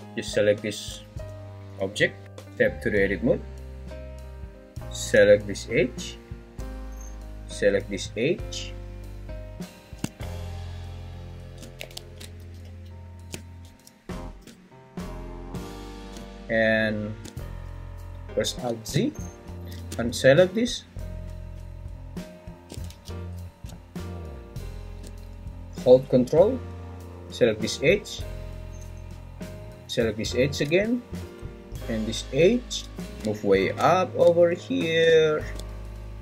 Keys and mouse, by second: 1.1 g, 1.8 `, 2.3 Escape, 2.4 Tab, 6.1 alt+click, 12.0 ctrl+z, 18.5 alt+z, 19.5 ctrl+z, 22.9 ctrl+z.